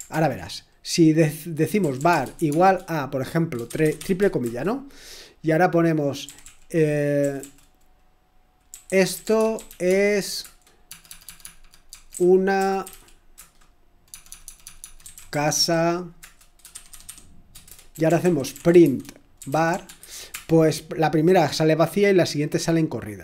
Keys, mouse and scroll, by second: 0.1 ctrl+l, 1.4-4.1 typing, 4.4 Return, 6.0-7.3 typing, 8.4-20.8 typing, 22.1-22.8 typing.